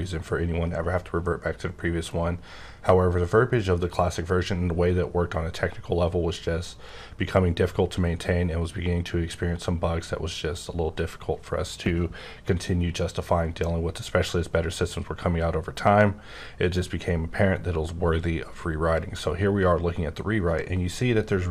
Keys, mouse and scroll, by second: 1.3-2.3 scroll up 2, 2.3-3.5 scroll up 2, 3.5-4.4 scroll up 2, 4.4-5.5 scroll up 2, 5.5-6.3 scroll up 2, 6.3-6.8 scroll up 2, 7.6-8.4 scroll up 3, 13.4-14.3 scroll up 6, 14.3-16.6 scroll up 4, 20.4-21.5 scroll up 4.